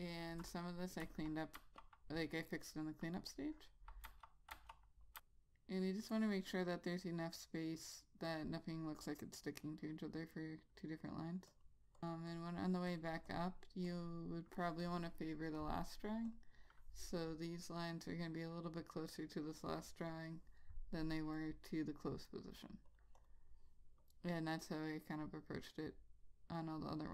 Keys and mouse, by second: 1.1 ,, 1.7 ., 4.2 ., 4.7 ., 5.2 click, 13.4 double click, 14.0 click, 21.9 click, 23.3 double click, 24.2 click.